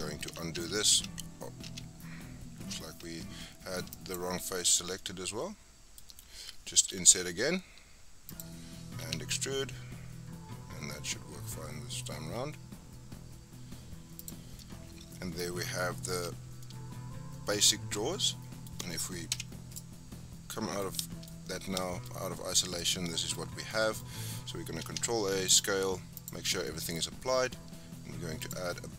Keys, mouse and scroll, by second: 0.6 ctrl+z, 0.9 ctrl+z, 1.7 ctrl+z, 3.9 ctrl+click, 4.6-5.0 scroll down 3, 5.0-6.9 middle drag, 6.9 i, 9.0 e, 14.4 scroll down 1, 14.6 middle click, 15.4-16.1 scroll up 6, 16.1 Tab, 16.5 scroll down 3, 16.6-19.3 middle drag, 19.3 KP_Divide, 19.8-20.2 right drag, 20.2-20.5 scroll down 4, 20.5-21.3 middle drag, 21.3-21.8 scroll up 4, 21.8-23.6 shift+middle drag, 23.6 scroll down 3, 23.7-24.8 middle drag, 24.8 ctrl+a, 26.2 click, 26.6-28.4 middle drag, 28.4 click.